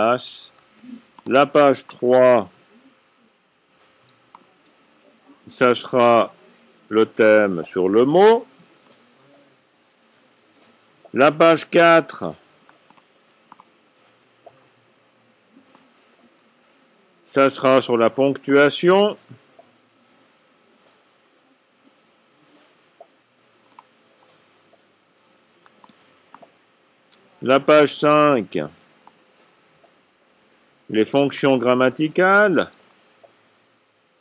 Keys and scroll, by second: 0.2 typing, 3.4-4.2 typing, 7.8 c, 9.8-13.0 typing, 14.6 a, 20.5 c, 24.8 v, 28.1-28.9 typing, 33.5 c.